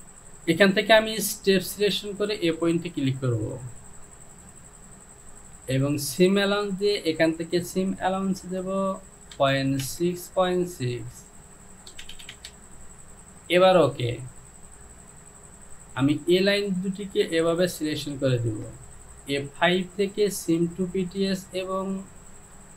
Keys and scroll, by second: 9.9 Down, 12.0 Down, 12.2 Down, 12.4 Down.